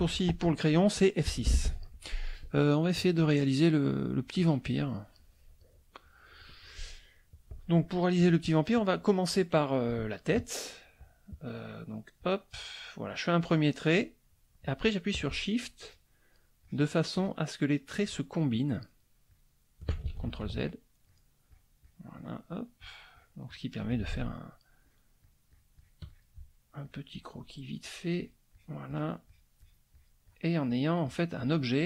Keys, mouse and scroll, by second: 1.6 F6, 1.6 click, 2.6 click, 4.5 click, 4.9 click, 5.1 middle click, 6.0 middle click, 12.2-14.1 drag, 15.8 shift+click, 16.6 shift+click, 17.1 shift+click, 18.1 shift+click, 19.3 shift+click, 20.6 ctrl+shift+z, 20.6 ctrl+shift+click, 21.1 ctrl+shift+click, 21.5 ctrl+shift+click, 21.8 ctrl+shift+click, 22.2 ctrl+shift+click, 22.5 ctrl+shift+click, 23.5 ctrl+shift+click, 24.9 shift+click, 26.8 shift+click, 27.8 shift+click, 28.2 shift+click, 28.9 shift+click, 29.2 shift+click, 30.7 shift+click, 31.1 shift+click.